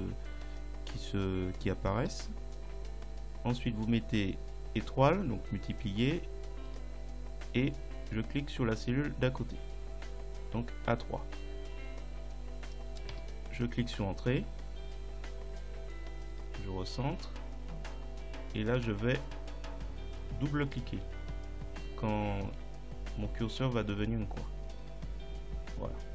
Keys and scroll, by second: 2.0 *, 13.2 Return.